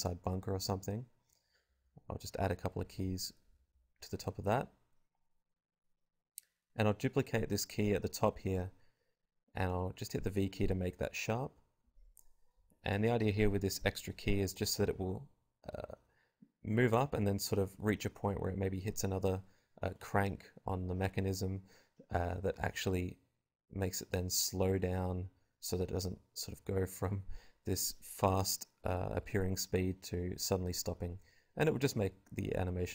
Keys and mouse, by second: 0.1 click, 0.1 i, 1.9 Home, 4.7 shift+d, 5.4-6.9 drag, 5.4 r, 6.9 v, 7.9 g, 8.4-9.5 drag, 9.5 g, 11.6 g, 11.7 click, 11.8 g, 12.3 alt+a, 12.3 click, 12.8 alt+a, 12.9-14.0 drag, 12.9 g, 13.6 alt+a, 14.0 shift+Left, 14.4 alt+a, 15.5-20.7 drag, 21.1 middle click, 21.3 click, 22.3 click, 22.6 r, 23.6-24.9 drag, 24.8 i, 25.2 click, 25.5 r, 26.7 click, 27.5 click, 28.0 click, 28.1 r, 28.7 click, 28.7 i, 29.3 right click, 29.5 n, 30.0 click, 30.7 click, 31.4-32.6 typing, 31.8 click, 32.8 ctrl+z.